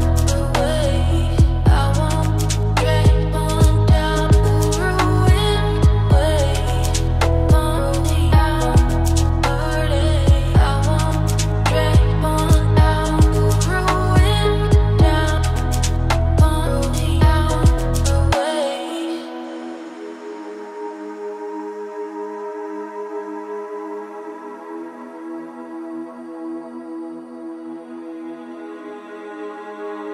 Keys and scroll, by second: 6.0 ctrl+z.